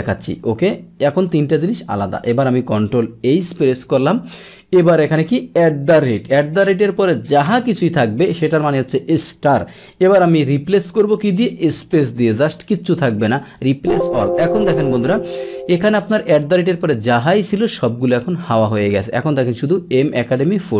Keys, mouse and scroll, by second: 1.2 click, 4.5 click, 9.8 click, 13.5 click, 14.7 click, 16.0 click, 16.7 click.